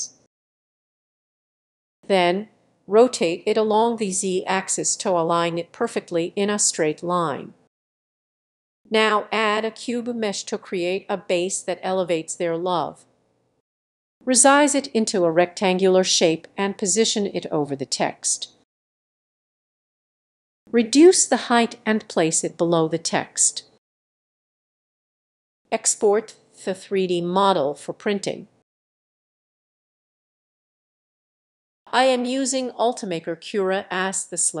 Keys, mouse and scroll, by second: 0.0-7.9 drag, 8.8-15.0 drag, 16.1-17.6 drag, 17.6 g, 18.5-21.6 drag, 23.9-24.5 drag, 24.5 g, 26.0-28.3 drag, 28.9 click, 29.1 typing, 30.2-34.6 drag.